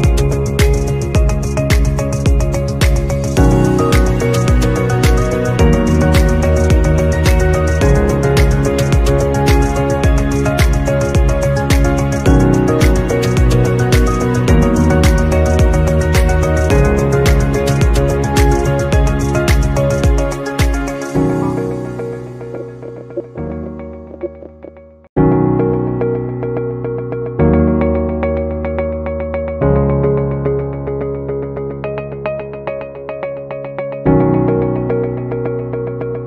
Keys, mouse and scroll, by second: 1.2 shift+click, 4.7-5.7 scroll up 1, 14.8 double click, 15.8 Right, 16.1-20.7 typing, 22.1-25.0 typing, 32.8 typing.